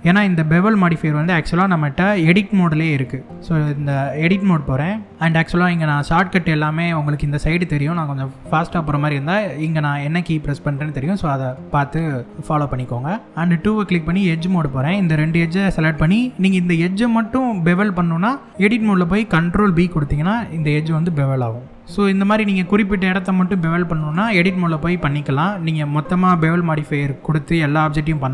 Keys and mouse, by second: 0.3-0.9 middle drag, 1.9-2.4 middle drag, 2.8-3.2 shift+middle drag, 3.6 Tab, 12.3 shift+middle click, 13.7 click, 14.9 shift+click, 15.8 middle click, 19.2 ctrl+b, 23.0 click, 23.7 click, 24.2-25.3 middle drag, 27.8 middle click.